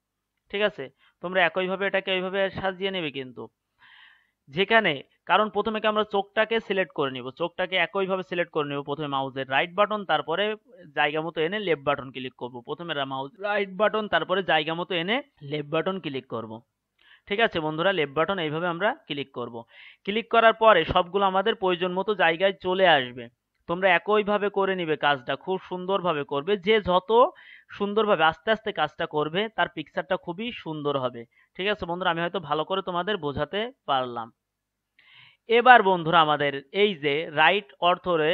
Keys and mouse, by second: 3.9-6.8 right drag, 8.4-11.6 right drag, 12.9-15.3 right drag, 15.7-17.5 right drag, 18.4-20.8 right drag, 21.3-22.6 right drag, 24.0-26.0 right drag, 27.1-28.9 right drag, 30.0-32.6 right drag, 33.7-35.6 right drag.